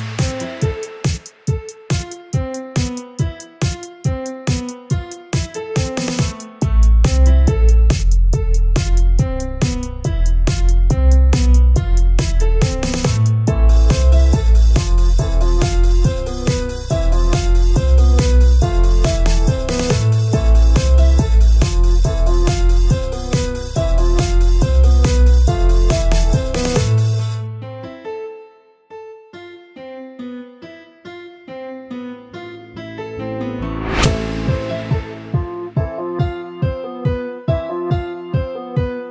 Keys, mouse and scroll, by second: 0.0-11.0 typing, 0.1 click, 0.8 click, 1.3 click, 1.9 click, 2.5 click, 2.8 shift+middle click, 3.0 click, 3.6 click, 4.1 click, 4.9 click, 5.6 click, 6.1 click, 6.8 click, 7.4 click, 8.4-8.8 shift+middle drag, 8.8 click, 11.1 scroll down 2, 11.3 middle drag, 11.6 scroll up 1, 11.8 shift+middle click, 12.5 KP_1, 12.8 z, 13.1 click, 13.6 g, 15.2 scroll up 4, 15.5 shift+middle click, 16.2 z, 16.5-17.9 middle drag, 17.9 ctrl+j, 19.0-20.1 right drag, 20.1 Tab, 20.3 a, 20.3 a, 20.5 scroll up 2, 20.6 middle click, 20.9 scroll down 3, 21.1 shift+middle click, 21.2 scroll up 1, 21.4 middle click, 22.3-26.4 typing, 26.6 middle click, 26.9 scroll up 1, 27.1-28.4 shift+middle drag, 28.4-34.0 typing, 32.0 middle click, 34.2-35.6 middle drag, 35.6-38.4 typing, 37.6 shift+middle click, 38.6 alt+space, 38.7-39.1 middle drag.